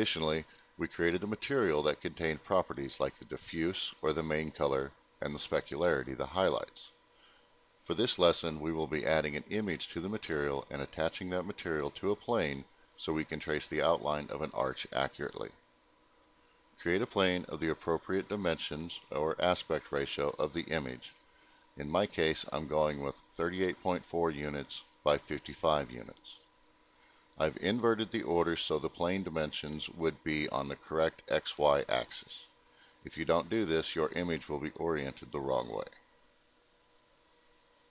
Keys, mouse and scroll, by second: 1.2 click, 6.3 m, 7.5 click, 8.6 scroll up 2, 8.7 middle click, 9.9 scroll up 1, 10.3 middle click, 14.8 click, 16.0 middle click, 18.3 click, 21.9 click, 23.6 click, 25.6 click, 31.9 click, 35.2 click, 36.0 middle click, 36.2 scroll down 2.